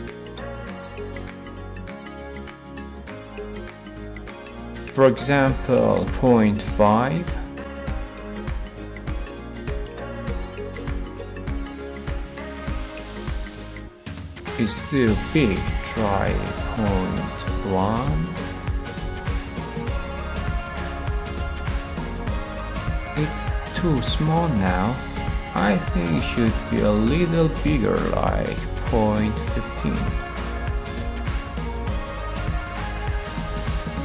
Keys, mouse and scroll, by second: 2.8-3.9 drag, 4.8-5.6 typing, 7.6-8.7 drag, 8.2-8.9 typing, 9.0 Return, 16.3-17.5 drag, 16.8-17.5 typing, 19.3-20.5 drag, 19.9-20.7 typing, 24.2-25.3 drag, 27.6-28.6 drag, 28.9-29.8 typing, 32.1-33.2 drag, 32.7-33.8 typing.